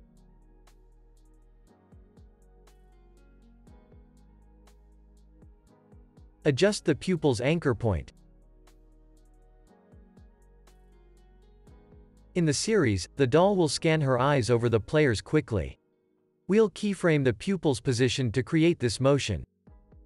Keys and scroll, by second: 2.4 super+z, 3.3 super+s, 7.1 space, 9.4 y.